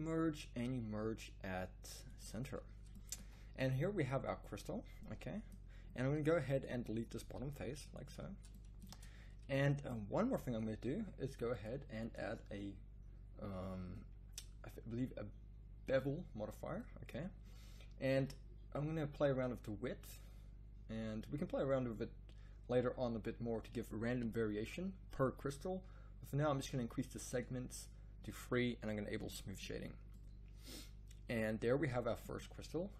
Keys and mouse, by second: 3.2 z, 7.2 x, 8.9 Tab, 26.6-29.5 drag, 29.5 middle click, 30.5-32.5 middle drag.